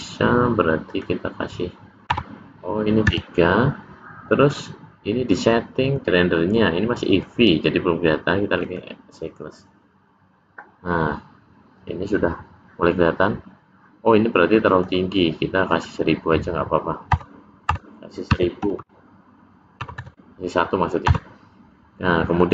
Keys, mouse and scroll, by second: 0.9 click, 5.9 click, 7.2 click, 14.9 click, 16.1 click, 20.7 KP_0, 20.7 BackSpace.